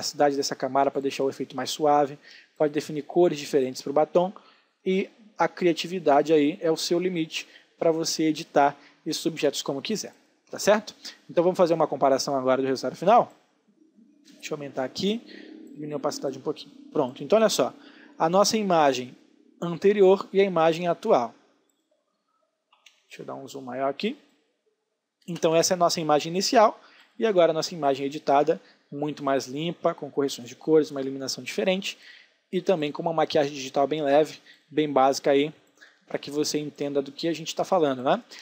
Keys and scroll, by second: 22.4 space.